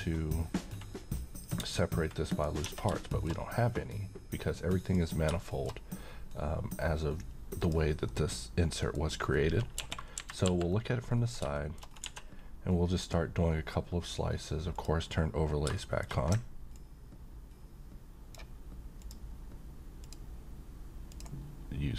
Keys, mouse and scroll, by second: 1.2-2.7 middle drag, 2.6 Tab, 3.0 shift+middle click, 4.8 click, 5.4 middle click, 7.6 click, 8.1-9.0 middle click, 9.1-10.9 scroll down 1, 11.2 scroll up 1, 11.5 shift+middle click, 11.8 scroll up 1, 12.0 d, 13.0 click, 14.7 click, 15.7 middle click, 16.7-18.6 ctrl+drag.